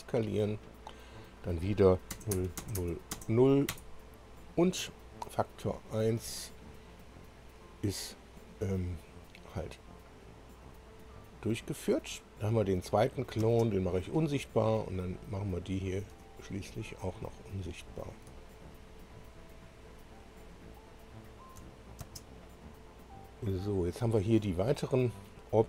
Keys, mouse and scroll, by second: 0.1 click, 2.1 0, 2.3 Tab, 2.7 0, 3.1 Tab, 3.2 0, 3.9 Return, 5.7 click, 10.0 click, 13.0 click, 15.3 click, 16.4 ctrl+click, 17.1 ctrl+click, 17.9 ctrl+click, 18.6 ctrl+click, 19.3 ctrl+click, 21.3 ctrl+click, 22.1 space.